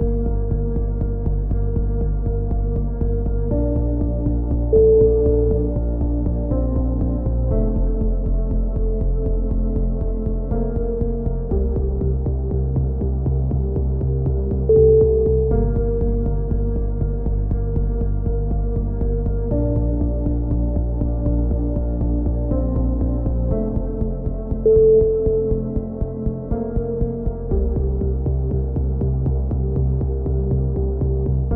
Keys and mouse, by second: 1.3 KP_6, 1.8 KP_7, 2.5 z, 2.8 z, 3.5 click, 12.8 Tab, 14.3 z, 14.9 c, 15.6-17.7 drag, 17.7 z, 18.4 ctrl+z, 19.0 c, 20.5 click, 21.9 a, 23.8 click, 24.6 middle click, 25.3 c, 26.0 right click, 26.9 middle click, 28.6 a, 29.2 ctrl+r.